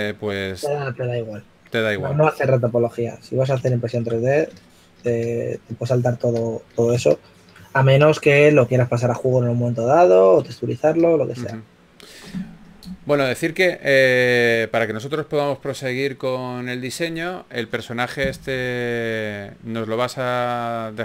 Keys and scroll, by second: 14.9 4, 16.8 d, 18.2 shift+d, 18.5 shift+d.